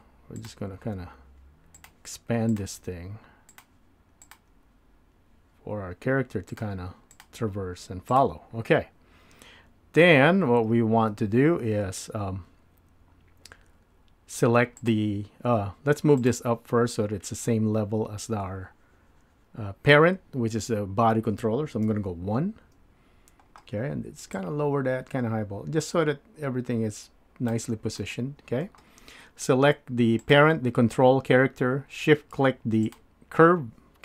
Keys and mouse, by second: 6.2 g, 7.3 click, 7.5 g, 11.2 Tab, 21.8 KP_1, 24.5-27.5 drag, 28.0-28.9 middle drag, 30.2 click.